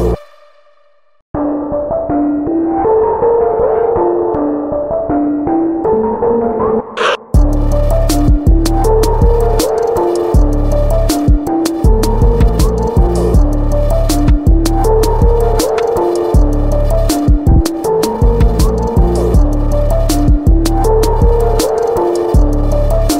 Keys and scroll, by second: 11.9 ctrl+z, 19.8 ctrl+z, 22.2 ctrl+z, 22.8 ctrl+z.